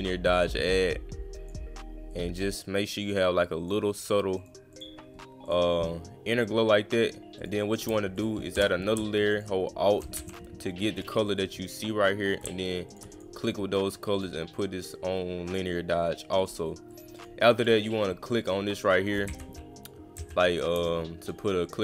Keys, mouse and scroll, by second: 2.1 click, 4.4 click, 4.7 click, 5.4 click, 7.4 click, 8.2 click, 9.3 alt+click, 11.0 click, 12.9 click, 13.1 click, 14.2 click, 15.5 click, 16.4 click, 16.9 click, 17.2 click, 17.6 click, 18.4 click, 21.2 click, 21.6 click.